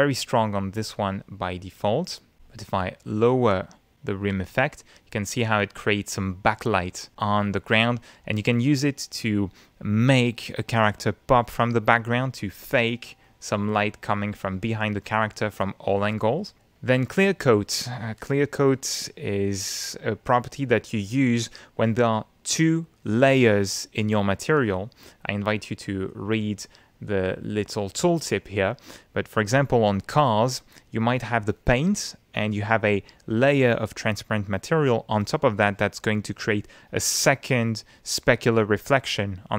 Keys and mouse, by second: 0.4 middle click, 0.6 click, 3.2-7.8 drag, 8.3-9.4 middle drag, 9.6 middle click, 14.1 click, 15.0 click, 17.7 click, 29.6 click.